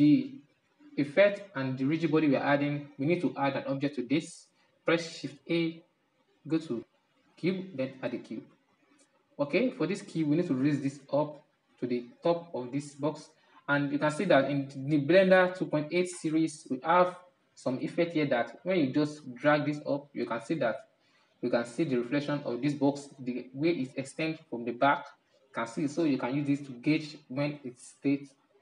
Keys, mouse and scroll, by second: 8.2 shift+a, 9.8-14.0 middle drag, 14.0-14.8 scroll up 5, 15.6-19.4 middle drag, 19.4-23.8 drag, 23.8-26.6 middle drag, 26.6-28.4 drag, 28.4-28.6 middle drag.